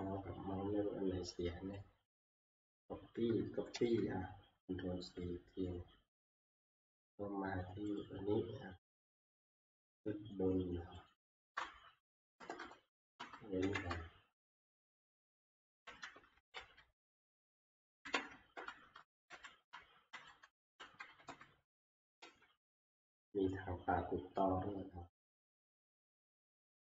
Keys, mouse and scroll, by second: 1.7 click, 2.2 ctrl+c, 3.7 ctrl+c, 8.0 click, 8.7 scroll, 11.1 click, 12.4 Return, 12.6 Return, 13.1 middle click, 13.6 End, 13.9-15.0 Up, 15.2-15.9 scroll up 14, 15.9 Home, 16.5 ctrl+v, 18.0 shift+End, 19.3 Home, 20.1 ctrl+shift+Home, 20.8 Down, 21.1 Down, 21.3 Down, 22.2 ctrl+c.